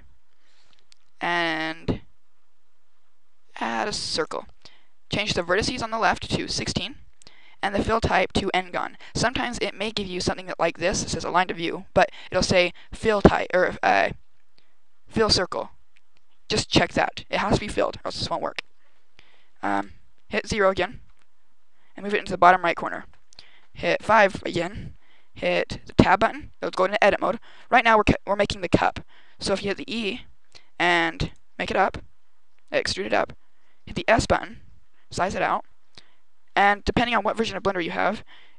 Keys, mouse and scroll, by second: 5.2 click, 7.6 click, 18.4-19.6 scroll up 3, 19.6 KP_0, 20.9 g, 22.8 click, 23.9 KP_5, 25.9 Tab, 29.5 e, 31.2 click, 34.0 s, 35.0 click, 36.8 KP_8, 37.1 KP_8.